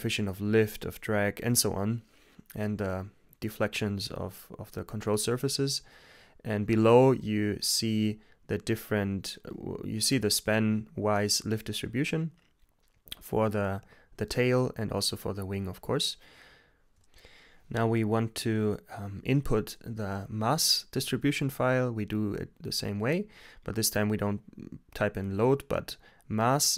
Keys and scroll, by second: 3.8 Return, 23.8-25.2 typing, 25.2 super+v.